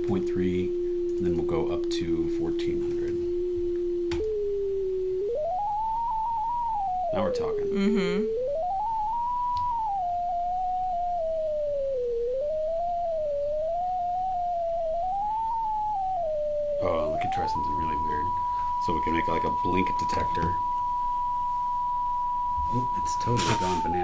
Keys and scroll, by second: 0.1 3, 2.1-3.4 typing.